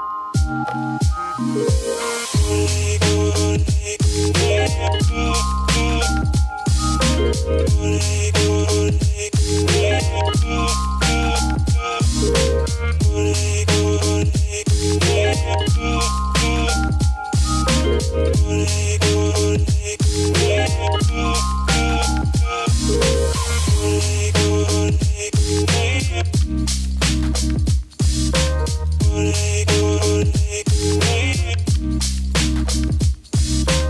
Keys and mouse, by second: 0.0 ctrl+z, 0.2 ctrl+z, 0.2 click, 0.4 click, 0.6 click, 0.9 click, 1.4 click, 1.7 ctrl+z, 1.7 click, 1.8 click, 2.1 click, 2.6 ctrl+z, 2.9 click, 3.0 ctrl+click, 3.4 ctrl+z, 3.4 click, 3.6 ctrl+z, 4.4-5.4 drag, 5.6 click, 5.8 ctrl+z, 5.8-7.0 drag, 6.1 ctrl+z, 7.1 click, 7.3 ctrl+z, 7.5 ctrl+z, 7.5 click, 8.3 ctrl+z, 8.3 click, 8.7-9.1 drag, 9.2 click, 9.8 click, 11.0 F2, 11.1 a, 11.2 s, 11.7 g, 12.0 click, 12.8 click, 13.8 F3, 14.0 click, 14.3-15.1 drag, 15.3 click, 15.8 ctrl+z, 15.8 click, 16.6 click, 18.4 F2, 18.5-21.7 typing, 19.0 click, 19.8-20.2 drag, 21.0 drag, 26.6-27.0 middle drag, 27.8 middle click, 30.1 click, 31.1-31.5 middle drag, 31.5 a, 32.0-33.8 drag.